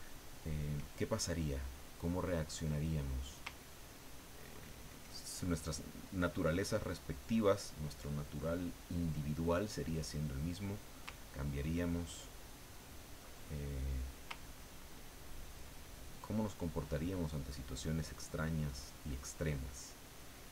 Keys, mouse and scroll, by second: 0.9-3.7 ctrl+middle drag, 12.0 ctrl+click, 13.3 ctrl+click, 14.5 ctrl+click, 15.0 ctrl+click, 15.5 ctrl+click, 15.9 ctrl+click, 18.1 ctrl+click, 20.0-20.5 ctrl+drag.